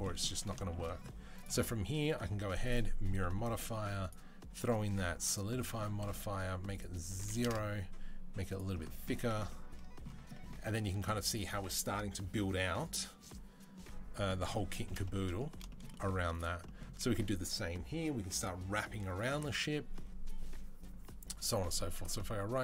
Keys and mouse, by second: 1.2-11.0 drag, 10.6 Tab, 11.0-22.6 middle drag.